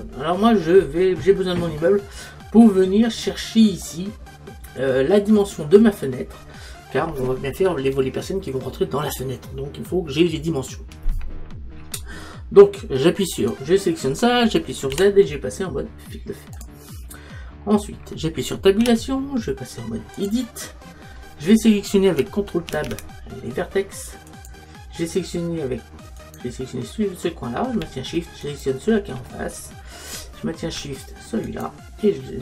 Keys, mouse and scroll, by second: 13.5-15.1 right drag, 15.1 z, 17.5-18.8 middle drag, 18.8 Tab, 21.2-22.7 middle drag, 22.7 ctrl+Tab, 26.2-29.7 right drag, 29.6-31.2 middle drag.